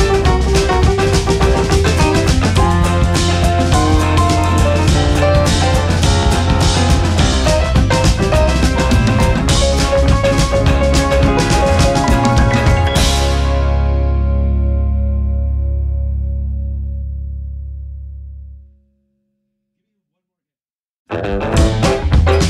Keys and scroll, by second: 13.4 ctrl+x, 14.1 ctrl+v.